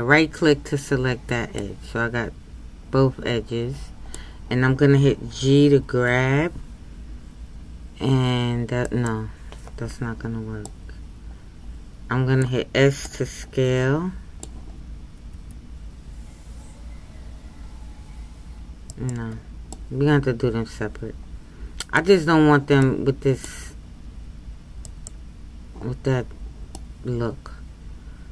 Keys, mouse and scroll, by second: 1.6-5.9 middle drag, 5.9 g, 10.6-15.3 middle drag, 15.3 s, 19.7-24.8 middle drag, 24.8-26.8 right drag, 26.8-28.3 middle drag.